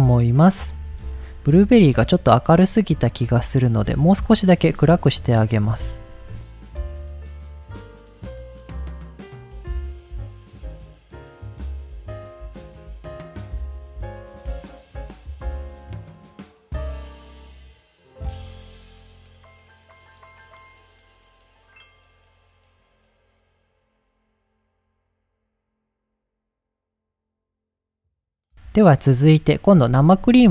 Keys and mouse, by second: 1.3 middle click, 2.0 middle click, 2.5 middle click, 3.3 middle click, 4.5 click, 5.0 click, 7.3 click, 7.5 click, 8.6 middle click, 8.8 click, 9.1 middle click, 9.2 click, 9.4 click, 10.3 ctrl+z, 10.5 click, 11.9 click, 12.2 drag, 12.3 click, 13.0 click, 13.2 middle click, 13.3 middle click, 13.6 click, 14.5 middle click, 14.7 click, 15.3 middle click, 15.5 click, 15.8 click, 16.4 middle click, 17.6-18.2 drag, 18.3 click, 18.7 middle click, 18.9-20.0 drag, 20.7 drag, 20.9 click, 23.5 drag, 23.8 middle click, 24.1 click, 24.3 middle click, 24.6 click, 25.4 click, 25.6 shift+middle click, 25.9 middle click, 26.2 middle click, 26.9 shift+middle drag, 27.1 middle click, 29.1 middle drag, 29.7 click, 30.3 g, 30.4 z.